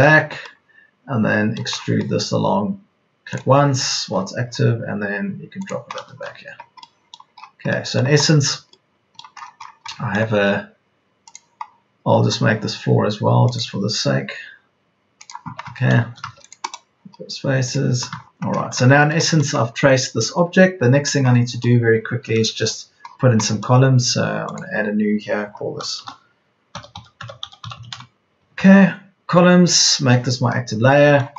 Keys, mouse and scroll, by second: 0.3 ctrl+z, 6.2 Escape, 25.9-28.2 typing.